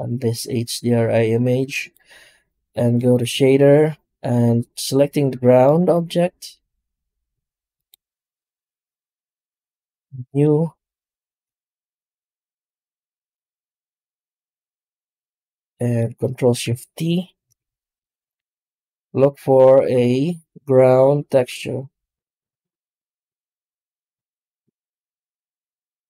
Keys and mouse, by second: 1.3 click, 2.8-3.1 drag, 5.3 g, 5.5 right click, 5.8 g, 11.3 click, 15.5 middle click, 16.2 click, 17.0 ctrl+shift+t.